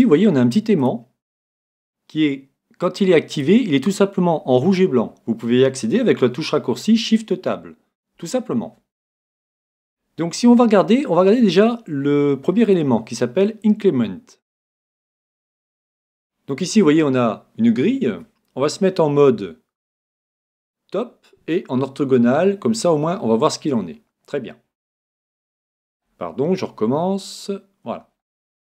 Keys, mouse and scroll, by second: 0.8-2.7 drag, 3.3-5.2 drag, 12.6-14.6 drag, 15.2-17.1 middle drag, 23.7-27.8 middle drag.